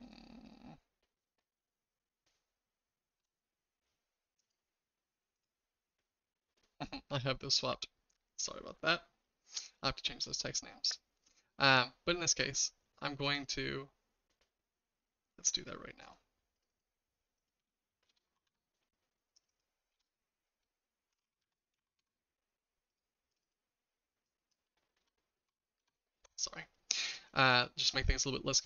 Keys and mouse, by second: 0.0-3.2 shift+middle drag, 4.4 click, 5.3 click, 7.7-10.2 shift+middle drag, 9.9 typing, 13.3 click, 16.0 click, 16.8-19.0 drag, 19.3 click, 19.5-22.4 drag, 22.9 click, 23.5-26.3 drag, 27.4 click.